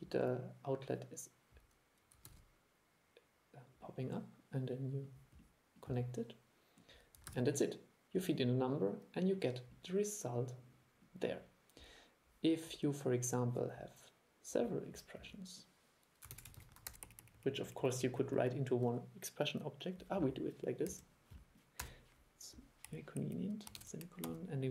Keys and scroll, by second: 2.4 super+e, 7.4 super+e, 16.4 super+c, 16.7 super+v.